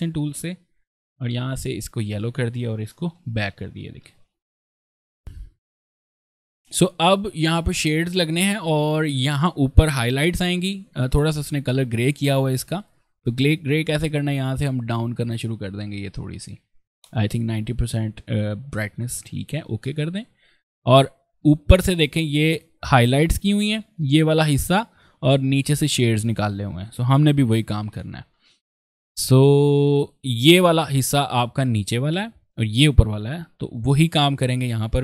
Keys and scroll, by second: 1.0 i, 1.9 v, 2.6 ctrl+v, 2.8 ctrl+[, 3.2 ctrl+v, 3.8 ctrl+space, 4.7 ctrl+space, 10.4 space, 21.3 ctrl+space, 28.2 ctrl+space, 29.4 ctrl+space, 30.4 ctrl+space, 33.2 ctrl+space.